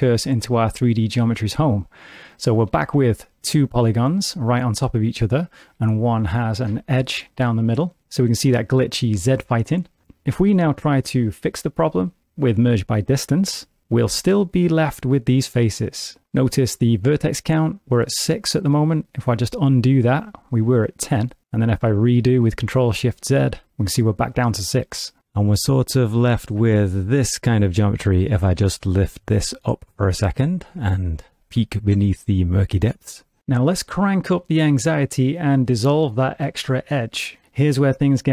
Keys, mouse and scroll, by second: 2.7 shift+d, 6.5 ctrl+r, 8.0 middle click, 10.3 middle click, 10.7 a, 11.2 middle click, 12.3 m, 14.4 middle click, 18.6 middle click, 19.6 ctrl+z, 23.2 ctrl+shift+z, 24.8 middle click, 25.6 2, 26.3 click, 26.7 middle click, 27.8 g, 30.0 middle click, 30.5 middle click, 31.8 g, 33.3 middle click, 34.6 g, 36.1 middle click, 36.5 x.